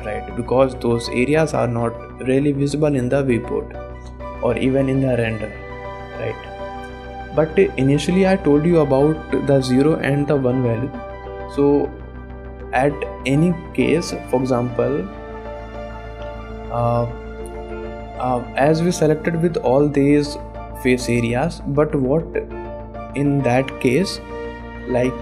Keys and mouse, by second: 0.1 middle click, 1.9 shift+middle click, 2.8 middle click, 5.8 click, 6.1 middle click, 6.5 click, 7.1 middle click, 7.4 shift+middle click, 11.9-12.5 middle drag, 13.0 shift+middle click, 17.1 click, 17.4 middle click, 17.7 Tab, 18.1 click, 19.2 click, 19.7 click, 20.2 click, 20.8 click, 21.7 click, 24.3 shift+click.